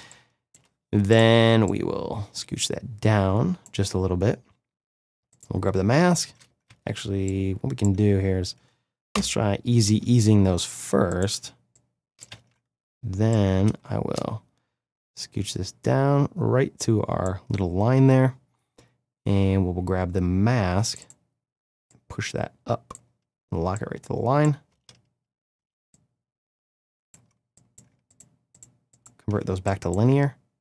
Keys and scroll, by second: 6.6 ctrl+z, 9.1 F9, 12.3 ctrl+z, 24.7 space.